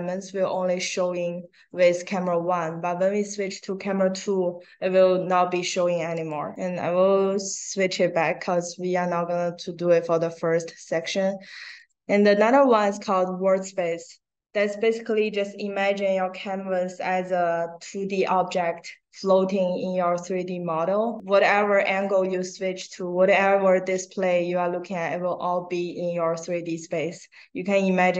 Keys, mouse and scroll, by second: 6.1 click, 6.9 middle click, 6.9 scroll up 1, 7.3 click, 8.5 click, 11.7 click.